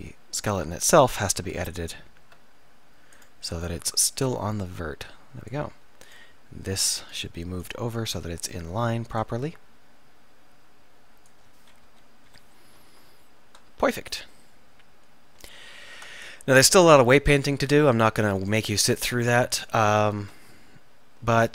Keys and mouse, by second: 1.5 Tab, 2.4 Tab, 4.2-9.5 right drag, 9.6-11.4 right drag, 11.9 KP_1, 12.4 KP_3, 16.0 Tab, 17.0 middle click, 20.2 Tab.